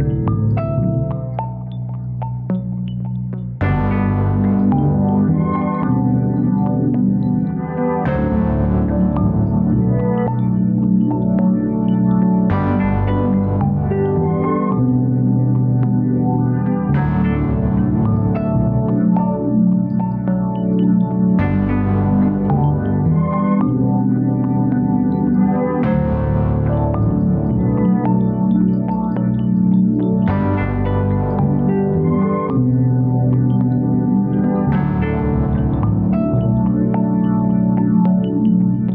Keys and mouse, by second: 1.0 1, 11.3 ctrl+r, 23.3 alt+shift+click.